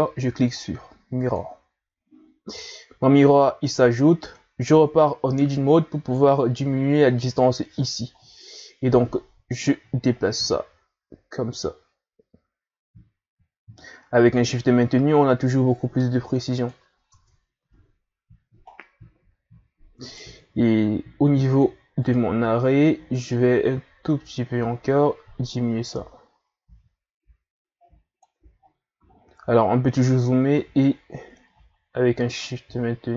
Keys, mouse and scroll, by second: 2.7-3.3 scroll down 2, 3.3-4.3 scroll up 1, 4.3-4.9 scroll up 1, 4.9 Tab, 8.1-8.5 scroll down 2, 8.5-9.5 scroll up 2, 9.5 scroll up 1, 9.6-12.6 drag, 17.1 Tab, 17.6 a, 18.7 scroll down 5, 19.6-20.1 scroll up 2, 20.1 right click, 21.5-26.3 drag, 28.5-29.4 scroll up 6, 30.6-33.1 shift+drag.